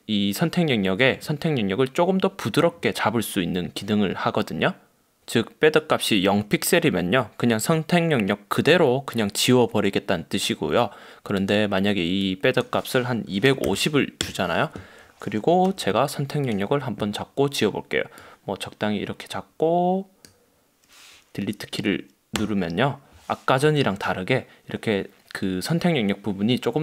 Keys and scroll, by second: 22.5 BackSpace, 23.7 super+d.